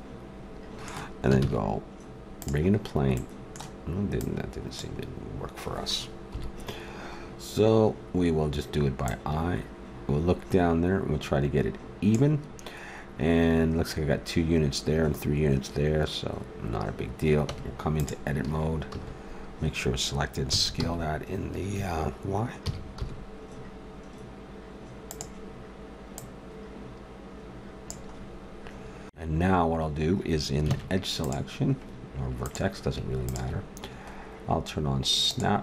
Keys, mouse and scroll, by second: 1.4 shift+a, 4.2-6.0 drag, 6.3 KP_7, 7.2-9.0 middle drag, 9.0-11.0 drag, 12.4-17.4 middle drag, 17.4 Tab, 18.4 a, 18.9 a, 20.5 s, 21.8 `, 22.6 s, 26.1-28.0 drag, 28.2-30.7 middle drag, 30.7 ctrl+Tab, 32.4-35.1 drag, 35.1 middle click, 35.3-35.6 drag.